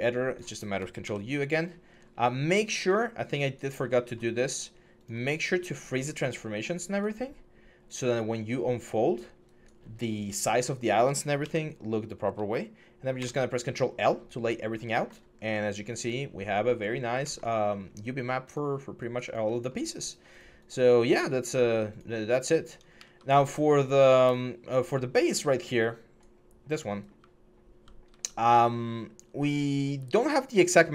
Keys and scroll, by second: 0.8 ctrl+u, 11.2 ctrl+u, 13.0 ctrl+l, 22.9 alt+Tab, 24.1 alt+Tab, 27.0-29.6 typing.